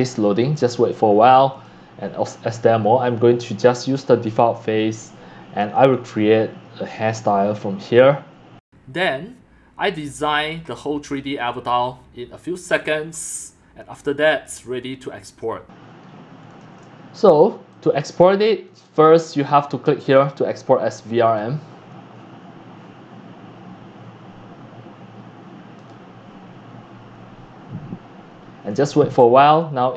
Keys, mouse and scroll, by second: 1.7-7.1 drag, 8.9 scroll down 6, 9.0 shift+middle click, 9.6 scroll down 4, 9.8-11.2 scroll up 21, 10.0 click, 10.6 shift+middle click, 10.7 click, 10.8 middle click, 11.1 click, 12.1 click, 13.3 click, 13.7-15.3 scroll up 14, 14.0 click, 14.3 shift+middle click, 14.5 click, 15.0 click, 15.3 shift+middle click, 15.5 click, 16.0 scroll up 3, 16.2 scroll, 16.8 shift+middle click, 18.4-21.3 shift+middle drag, 21.3-29.9 drag.